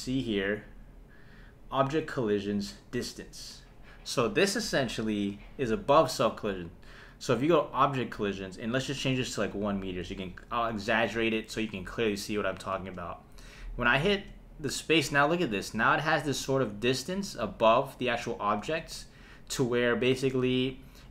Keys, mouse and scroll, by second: 8.6-9.9 drag, 12.7 space, 14.2 space, 18.6 space, 20.4 space.